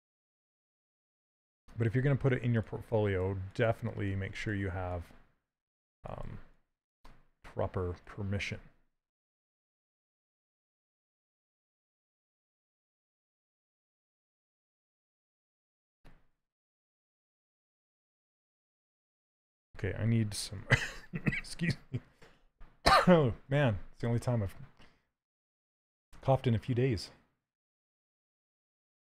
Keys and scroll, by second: 21.0 shift+f.